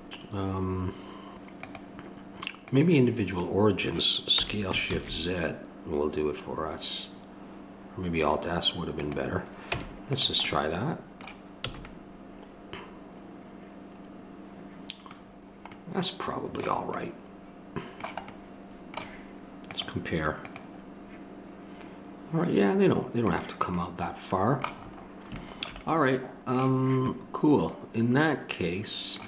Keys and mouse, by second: 1.6-4.4 drag, 4.4-8.9 middle drag, 4.4 s, 9.7 Tab, 11.7 a.